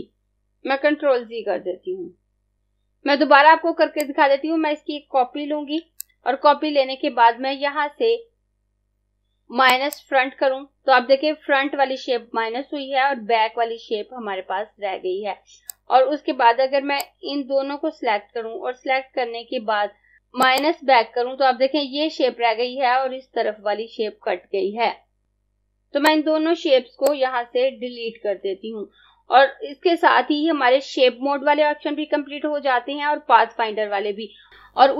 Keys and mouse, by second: 0.4 click, 1.0 z, 4.0 click, 9.7 click, 15.5 click, 20.5 click, 26.1 click, 28.2 Delete.